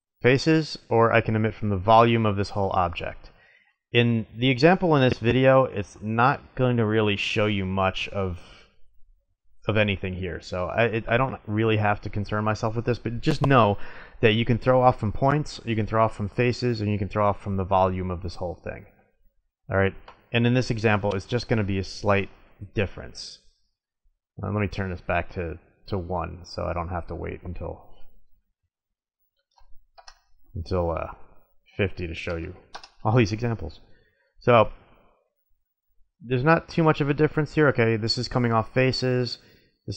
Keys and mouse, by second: 3.8-5.6 middle drag, 10.8 Tab, 19.5-22.5 drag, 23.0 middle click, 24.0-25.7 drag, 25.7-27.5 middle drag, 27.5-29.5 drag, 29.5-30.9 middle drag, 30.9-32.8 drag, 32.8-34.3 middle drag, 34.3-35.5 drag, 38.7-39.8 middle drag.